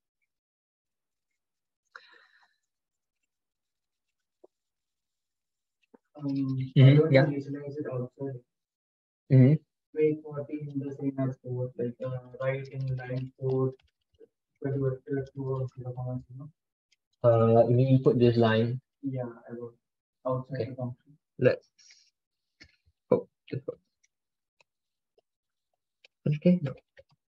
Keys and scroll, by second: 3.2 alt+Tab, 3.8 alt+Tab, 4.1 alt+Tab, 23.3 ctrl+x, 23.8 ctrl+z, 24.5 ctrl+shift+Left, 24.9 ctrl+Right, 25.9 ctrl+k, 26.6 ctrl+k, 27.0 ctrl+shift+Left.